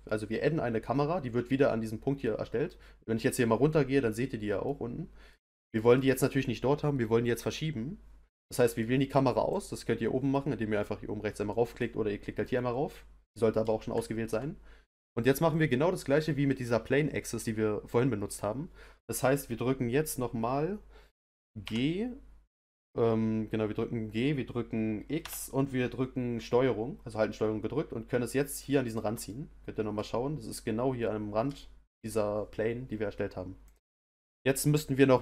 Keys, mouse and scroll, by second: 2.2-9.5 middle drag, 9.5 click, 11.5-17.0 middle drag, 21.6 g, 29.3-33.6 middle drag, 33.6 click, 34.6-35.2 middle drag.